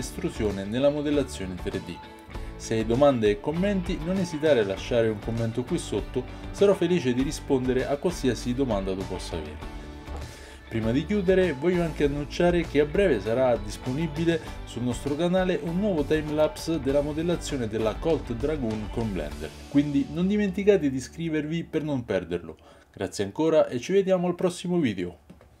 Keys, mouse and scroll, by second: 0.0-2.3 typing, 0.7 right click, 1.3 right click, 3.3 ctrl+z, 3.4 ctrl+z, 4.3 right click, 5.0 click, 5.0-8.2 typing, 5.3 click, 5.8 click, 7.1 Tab, 8.0 Tab, 9.1 right click, 9.3-20.2 typing, 9.4 Tab, 9.7-15.8 middle drag, 9.7 Tab, 13.3 ctrl+z, 13.5 ctrl+z, 14.2 ctrl+z, 14.8 ctrl+z, 14.9 ctrl+z, 15.8 click, 15.8-20.2 shift+middle drag, 16.6 ctrl+x, 17.8 ctrl+r, 18.7 shift+click, 19.4 Tab, 19.5-25.6 alt+right drag, 19.6 Tab, 19.6 alt+x, 19.9 shift+click, 20.1 ctrl+z, 20.3 alt+x, 21.0 ctrl+a, 21.0 ctrl+e, 21.6-25.6 typing, 21.6 shift+click, 21.6 shift+middle click, 22.5 click, 23.1 click, 23.4 Tab, 23.7 alt+x, 23.8 Tab, 24.4 Tab, 25.5 Tab.